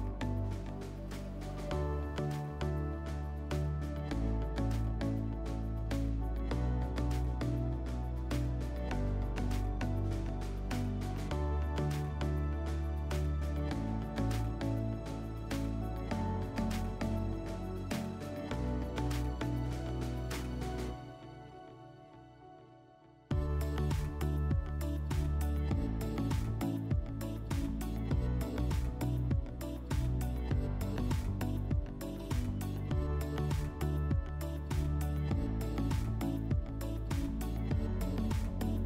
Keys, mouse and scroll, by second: 11.0 click, 19.0 click, 19.7 click, 25.2 click, 32.7 click.